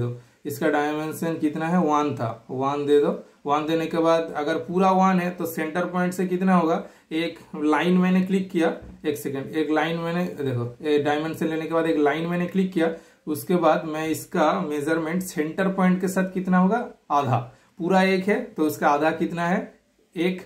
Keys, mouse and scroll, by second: 0.6 super+click, 2.2-2.5 typing, 2.5 super+click, 3.4 super+Return, 6.1 super+click, 8.9 super+right click, 9.6 super+click, 11.4 super+click, 13.3 super+click, 13.8 super+scroll down 1, 15.5 scroll up 2, 15.7 scroll down 1, 15.9 scroll up 1, 17.5 super+click, 19.5 super+click.